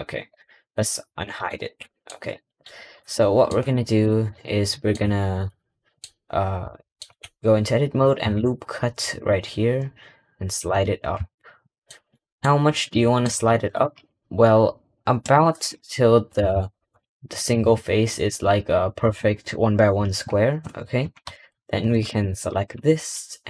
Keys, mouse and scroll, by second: 0.3 middle click, 2.0-2.3 scroll down 2, 2.3 middle click, 3.3-3.8 shift+middle drag, 4.0 scroll up 1, 4.7 shift+middle click, 4.9-5.3 scroll up 3, 5.3-6.0 middle drag, 6.0 scroll, 7.0-10.5 scroll up 1, 10.7-11.2 scroll up 3, 11.2 shift+middle click, 12.3 middle click, 13.5-16.8 middle drag, 17.3 click, 22.0 click.